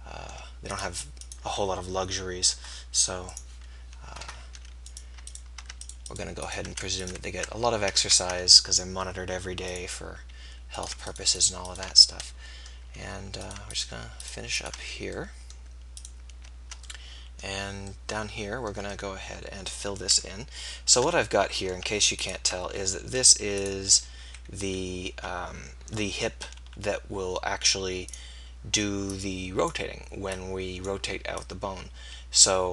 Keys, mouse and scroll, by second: 0.8-4.9 drag, 4.9-6.8 middle drag, 6.8 f, 8.1 ctrl+z, 11.8 f, 14.8 f, 24.1 KP_1, 26.5 r.